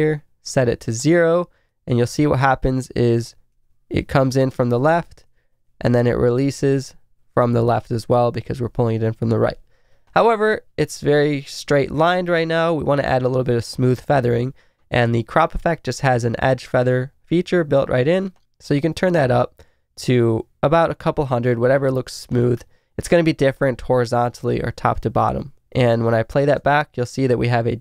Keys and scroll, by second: 4.0 Right, 26.6 space.